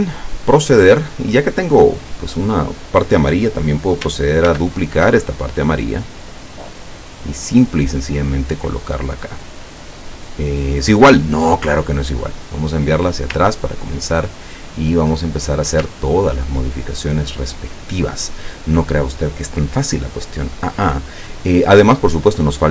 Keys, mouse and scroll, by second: 0.5 click, 1.1 click, 1.8 click, 4.5 ctrl+d, 5.1-11.1 ctrl+drag, 12.2 click, 13.5-15.1 ctrl+middle drag, 16.1 ctrl+scroll down 1.